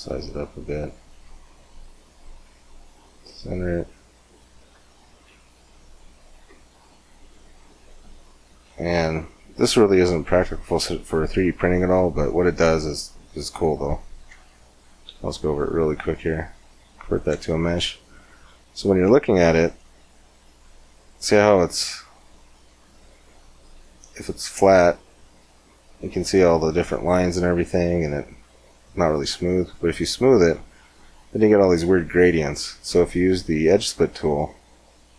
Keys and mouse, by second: 2.4 click, 3.2-8.0 middle drag, 9.9 middle click, 10.2-13.6 middle drag, 13.9-15.1 middle drag, 15.1 alt+c, 19.5-22.5 middle drag, 22.5 click, 23.3-28.3 middle drag, 30.0-32.1 drag, 33.3-35.1 drag.